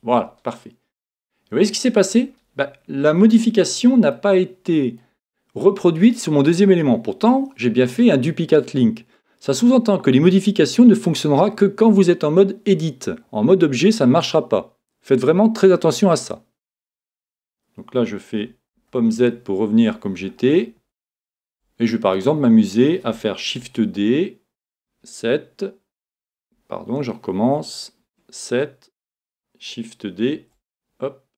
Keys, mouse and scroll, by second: 0.0 s, 0.1-1.8 drag, 0.6-3.9 middle drag, 2.5-3.6 scroll up 1, 3.6 scroll up 1, 4.2-6.0 middle drag, 19.2 super+z, 20.3-23.7 middle drag, 23.6 shift+d, 28.0 KP_7, 30.3 shift+d.